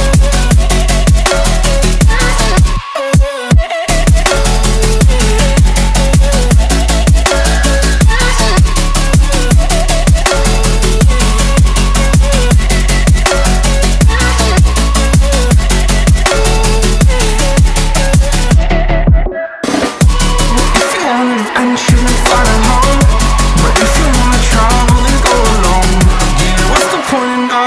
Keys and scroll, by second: 13.5 ctrl+t, 17.7 ctrl+t, 22.7 ctrl+s.